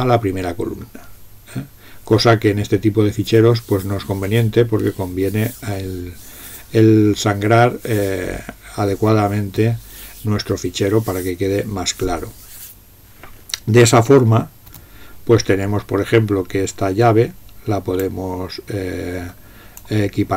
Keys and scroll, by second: 14.7 BackSpace.